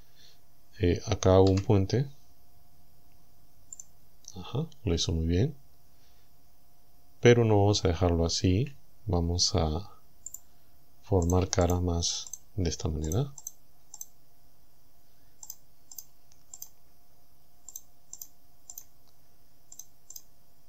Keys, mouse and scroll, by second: 1.5 w, 3.8 click, 8.5 a, 10.3 click, 11.3 shift+right click, 11.7 shift+right click, 12.3 shift+right click, 13.1 shift+right click, 13.5 shift+right click, 14.0 shift+right click, 15.5 shift+right click, 16.0 shift+right click, 16.6 shift+right click, 17.8 shift+right click, 18.2 shift+right click, 18.8 shift+right click, 19.8 shift+right click, 20.2 shift+right click.